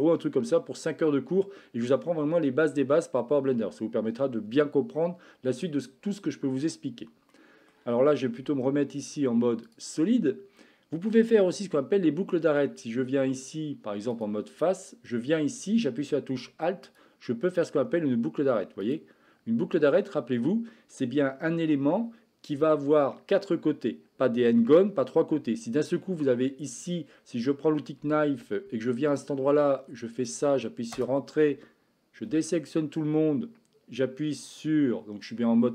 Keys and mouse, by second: 7.3 middle click, 8.4 z, 18.7 alt+click, 28.0 k, 32.2 a.